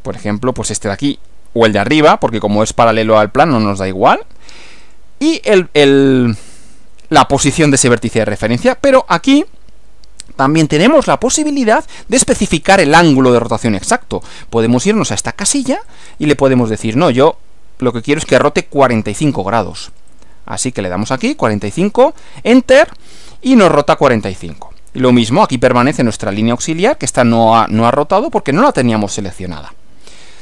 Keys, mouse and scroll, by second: 4.9 click, 15.9 click, 18.5-19.4 typing, 19.7 click, 20.5 4, 20.8 5, 21.8 Return, 30.2 click.